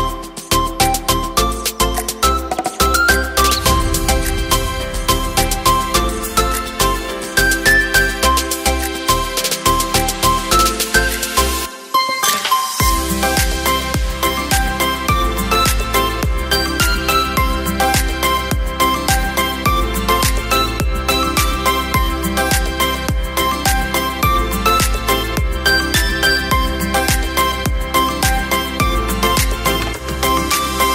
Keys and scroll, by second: 0.6 Caps_Lock, 0.9 w, 2.4 y, 2.4 o, 4.3 m, 10.2 v, 10.6 Down, 10.7 Down, 10.8 Down, 11.0 Down, 12.7 space.